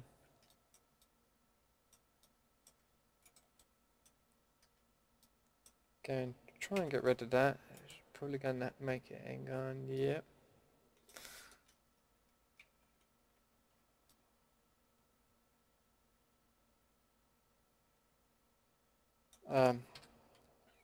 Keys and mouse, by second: 3.2 middle click, 3.9-5.2 middle drag, 6.7 ctrl+x, 12.6 ctrl+z, 13.5 ctrl+z, 14.0-15.0 drag, 16.2 middle drag, 17.8 middle click, 19.9 a.